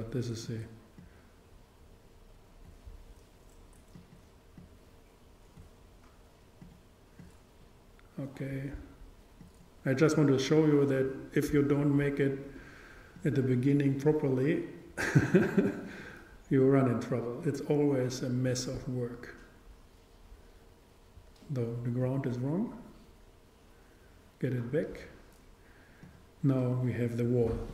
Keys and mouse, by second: 0.5-3.0 drag, 4.0-6.6 drag, 6.7-9.0 drag, 9.4-11.9 drag, 13.3-15.8 drag, 16.1-18.5 drag, 22.1-23.8 drag, 26.9-27.7 drag.